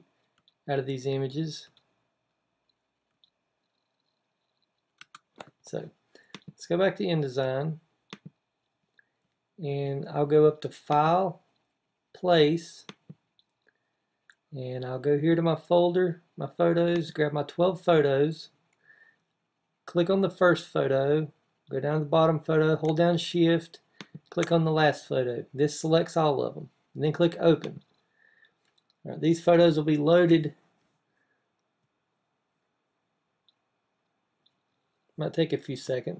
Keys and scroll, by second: 0.1 Down, 1.4 Down, 2.9 Down.